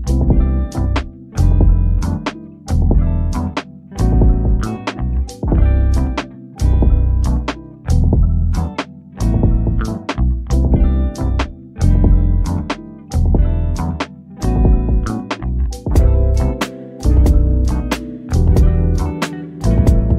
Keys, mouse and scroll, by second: 0.3 click, 0.8-1.2 scroll down 1, 1.2 middle click, 2.3 scroll down 1, 4.6 scroll up 1, 6.4-6.8 scroll up 1, 8.6 click, 9.0-9.6 scroll down 1, 9.6 middle click, 10.3-11.7 scroll up 1, 11.7 click, 12.1-12.4 scroll down 1, 12.4 middle click, 13.0-14.4 scroll up 1, 14.4 click, 14.8 scroll down 1, 15.3-16.6 middle drag, 16.6 scroll up 1, 18.0 click, 18.6-20.1 scroll down 1.